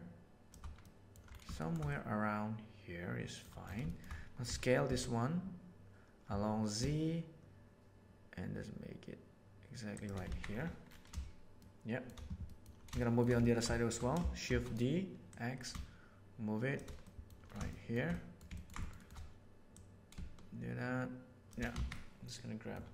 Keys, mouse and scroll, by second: 0.8-1.1 middle drag, 1.5 shift+middle drag, 1.9-2.6 middle drag, 2.6 click, 2.8-3.4 middle drag, 3.8 shift+middle drag, 4.4 s, 10.2 alt+a, 11.5 middle click, 12.5 middle drag, 12.9-13.3 shift+middle drag, 13.7 shift+middle click, 14.4 shift+d, 15.3-16.7 middle drag, 17.0-17.3 middle drag, 17.7-18.4 shift+middle drag, 19.7-21.4 right drag, 21.8 alt+a, 21.9-22.6 middle drag.